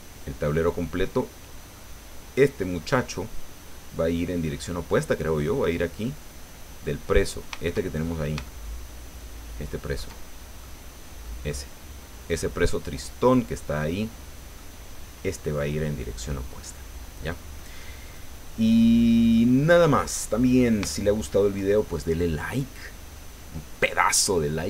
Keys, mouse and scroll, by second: 2.9 scroll down 2, 6.0-7.7 drag, 8.0-8.4 shift+scroll up 4, 8.5-10.1 shift+drag, 10.6-11.6 middle drag, 12.3 scroll up 1, 13.0 scroll down 1, 13.8 middle click, 18.0 click, 18.8-19.1 scroll down 1, 19.3 click, 20.3-20.6 scroll up 1, 20.9 shift+click.